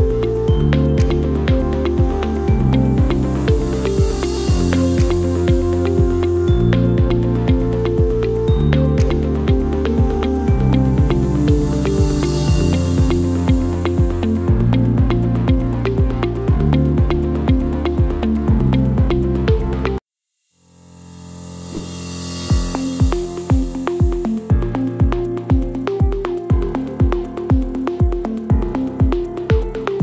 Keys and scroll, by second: 15.2 Delete, 18.8 f.